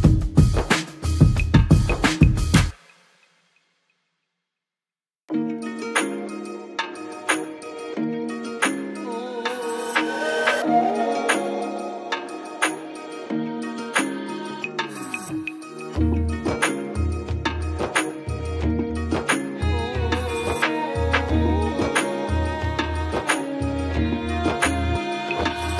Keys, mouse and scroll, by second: 2.8 click, 12.3 click, 16.5 space, 16.7 click, 16.9-17.3 space, 18.0 click, 18.8 click, 22.5 Delete, 23.9 ctrl+d, 24.5 space, 24.7 click, 24.9-25.7 space, 25.6 space.